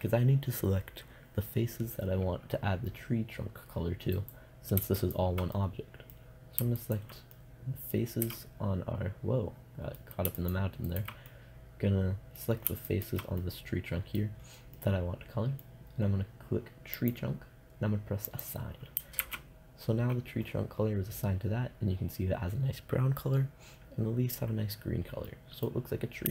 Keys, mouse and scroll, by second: 5.9-9.4 middle drag, 11.0 middle click, 11.5-12.9 middle drag, 13.3-15.1 middle drag, 15.3 middle click, 17.1-20.8 drag, 19.4 shift+z, 24.5-25.5 middle drag.